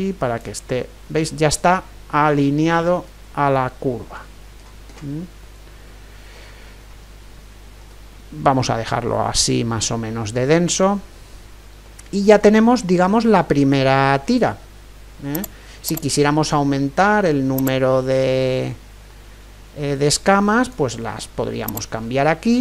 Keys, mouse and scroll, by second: 0.8-5.0 middle drag, 6.4-15.4 middle drag, 15.4-19.5 drag, 21.7-22.6 drag, 22.5-22.6 middle drag.